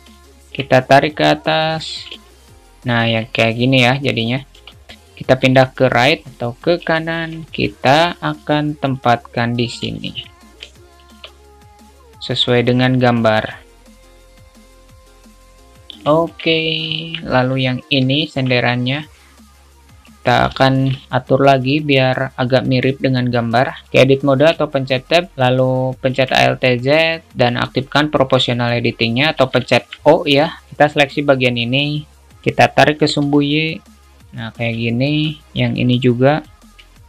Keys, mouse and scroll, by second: 0.4 alt+shift+middle click, 1.3 click, 2.7 alt+z, 2.7 alt+middle click, 7.2 alt+shift+middle click, 8.6-10.1 drag, 10.1 alt+shift+middle click, 10.9 shift+middle click, 12.0-13.7 drag, 14.0 alt+shift+middle click, 14.4 click, 15.5 click, 16.3 shift+middle click, 17.2 Tab, 17.7 drag, 18.4 shift+middle click, 19.2-20.7 drag, 20.9 alt+shift+middle click, 22.1 alt+shift+middle click, 22.9-23.9 drag, 24.8 shift+middle click, 26.4 alt+z, 28.0 click, 30.0 alt+shift+middle click, 30.7 click, 30.7 o, 33.1 g, 35.1 shift+middle click, 35.7 click.